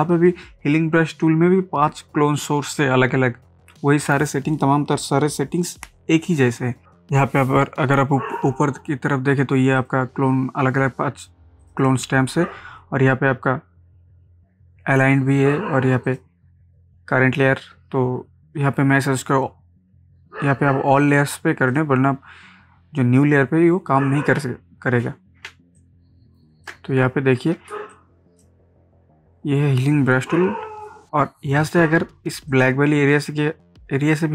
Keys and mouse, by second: 9.8 click, 16.0 click, 23.6 click, 24.3 ctrl+d, 25.5 ctrl+space, 25.8 ctrl+click, 26.0 ctrl+space, 27.4 ctrl+space, 27.9 click, 28.2 space, 32.5 alt+click.